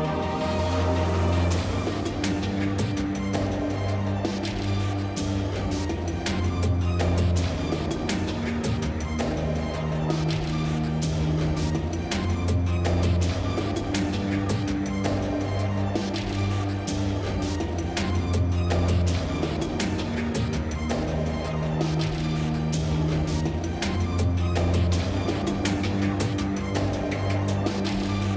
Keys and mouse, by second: 0.4 Tab, 0.7 ctrl+x, 1.4 k, 4.0 click, 4.2 g, 4.7 g, 5.1 ctrl+Tab, 5.4 click, 5.8-6.2 middle drag, 6.2 e, 6.5 alt+s, 7.2-7.9 drag, 7.6 x, 8.3 click, 8.8 middle click, 9.0 click, 9.0 x, 9.6 ctrl+Tab, 10.0 KP_7, 10.7 g, 11.7 z, 12.4 ctrl+Tab, 12.9 s, 13.4 Tab, 13.6 KP_7, 13.8 z, 14.4 Tab, 15.0 click, 15.4 ctrl+b, 16.7 z, 16.8 Tab, 17.1 KP_7, 17.4 z, 17.5 Tab, 17.7 Tab, 18.4 Tab, 18.7 space, 19.4 t, 19.7 t, 19.8 ctrl+Tab, 20.7 x, 21.9-22.6 middle drag, 22.6 KP_Divide, 22.7 KP_7, 23.2 z, 23.5 z, 24.0 k, 25.3-26.1 drag, 25.8 j, 26.3 j, 26.5 k, 27.9-28.3 typing, 28.2 Tab.